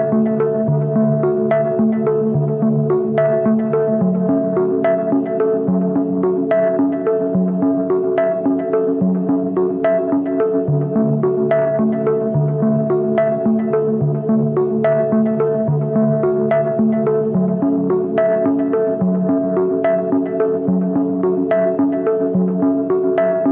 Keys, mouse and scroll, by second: 8.7 double click, 11.9 alt+click, 14.8-15.9 ], 16.4 ], 18.2 double click.